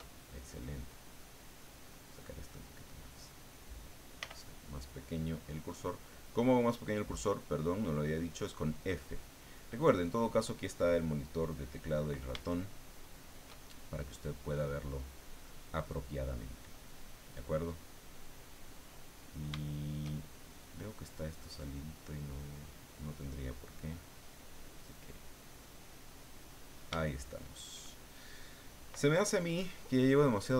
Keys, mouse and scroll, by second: 0.2-1.7 shift+middle drag, 2.4-3.7 drag, 4.2 f, 5.2 click, 6.1 click, 6.9 click, 7.8 click, 8.2 click, 8.8-10.5 middle drag, 12.5 shift+middle click, 16.9-19.5 middle drag, 19.6 shift+middle click, 21.2 click, 22.1 click, 22.7 click, 23.1 click, 23.5 click, 24.0 click, 24.6-25.6 drag, 25.7 click, 26.4 click, 27.0 shift+click.